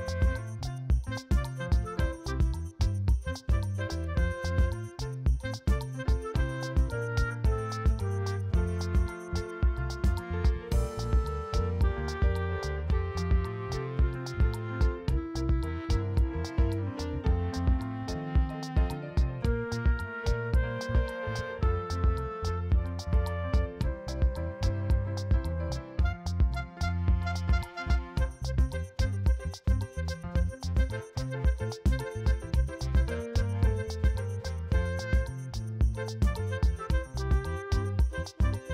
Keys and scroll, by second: 4.2-6.1 typing, 7.2 [, 10.1 space, 10.8 space, 14.8 ctrl+alt+z, 17.2 ], 19.0 [, 20.9 ], 22.6 ], 23.2 2, 28.0 space, 29.7 space, 30.0 space, 30.1 v, 31.0 l, 37.5 ctrl+alt+d, 38.5 ctrl+j.